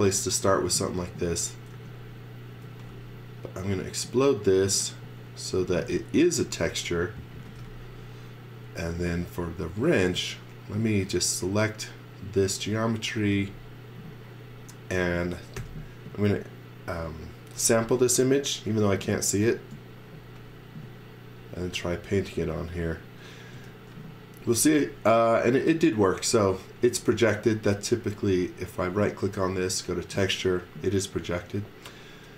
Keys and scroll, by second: 1.7 e, 2.5 space, 5.3-8.7 typing, 12.8-13.8 typing, 15.5 n, 23.5-25.1 typing, 26.8 space.